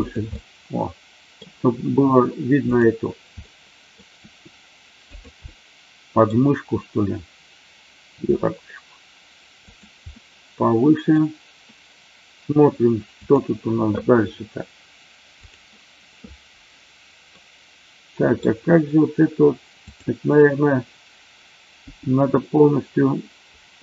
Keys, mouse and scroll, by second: 0.3-1.3 middle drag, 3.3 middle click, 4.2 r, 5.1 click, 5.4-6.3 middle drag, 8.1 r, 9.6 click, 10.2-11.1 middle drag, 17.3 middle click, 19.8 click, 21.8 g.